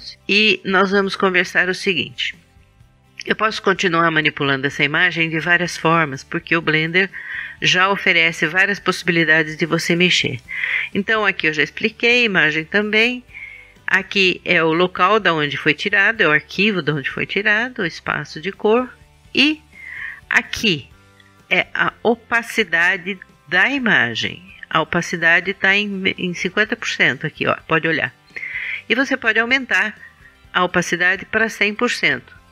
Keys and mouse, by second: 6.5-8.2 drag, 29.2-31.8 drag.